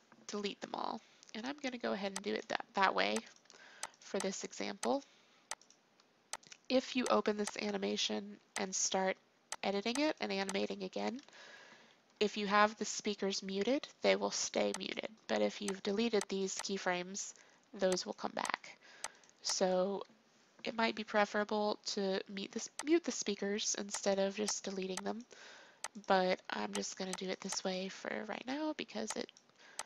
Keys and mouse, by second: 0.3 Delete, 3.6-11.9 drag, 11.9 Delete, 15.2 click, 15.4-20.6 drag, 20.6 Delete, 22.8-23.9 drag.